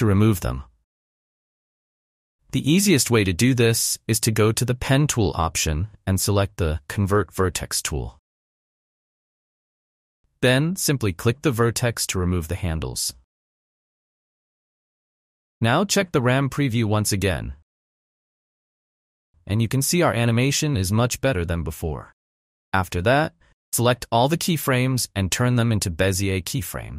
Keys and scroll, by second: 2.5 ctrl+z, 16.5 space, 20.3 space, 22.8 v.